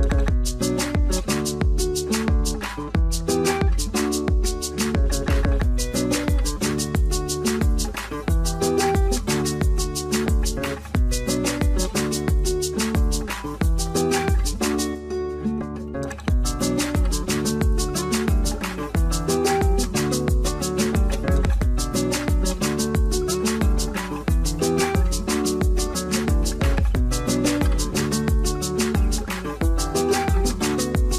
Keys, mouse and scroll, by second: 5.4 double click, 7.2 double click, 12.6 double click.